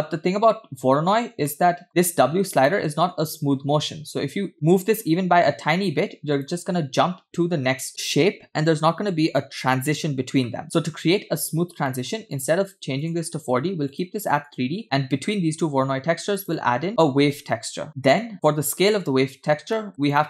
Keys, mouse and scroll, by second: 1.0 scroll up 2, 1.5 shift+middle click, 2.7 shift+middle click, 4.3-6.5 shift+drag, 11.6-12.0 scroll down 2, 12.0 middle click, 12.4 drag, 13.0-14.1 drag, 14.5 click, 16.0 shift+a, 17.9 click, 18.3 click, 19.7 scroll up 3, 19.9 middle click, 20.0-20.2 drag.